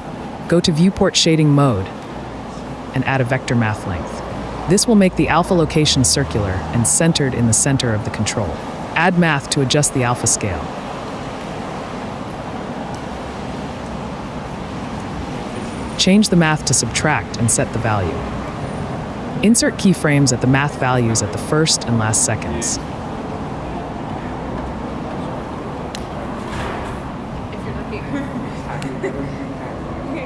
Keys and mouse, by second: 0.3 click, 1.7 middle click, 2.9 click, 3.6-4.2 drag, 5.0 shift+a, 9.0 shift+a, 10.0 d, 11.7 click, 11.9 shift+click, 12.1-14.1 shift+middle drag, 14.3-16.3 middle drag, 16.4 middle click, 17.8-19.1 shift+drag, 21.2-22.9 drag, 23.7 click, 24.4 click, 25.9 click, 27.4-29.4 drag.